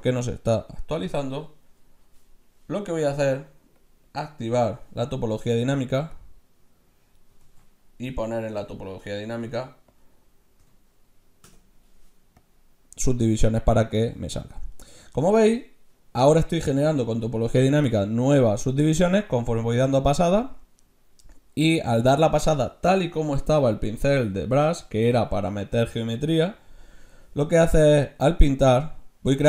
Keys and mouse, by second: 2.7-4.0 middle drag, 3.8 click, 4.8 click, 6.2-7.5 drag, 7.5 ctrl+z, 7.7 click, 8.6-11.6 drag, 12.5-14.1 drag, 14.1 ctrl+z, 14.7-15.9 middle drag, 22.9-23.9 middle drag, 24.3-26.8 middle drag, 28.4-29.4 drag.